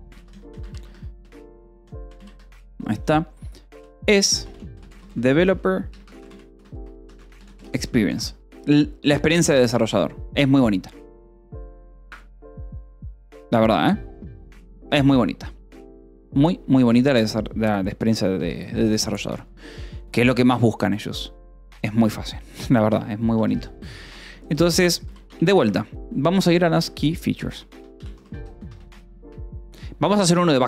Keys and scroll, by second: 0.0-2.4 typing, 3.6-8.1 typing, 8.6 ctrl+s, 18.0 o, 18.3 Return, 22.4 Return, 22.7-25.6 typing, 26.9-28.6 typing, 29.1 Escape, 30.0-30.6 typing.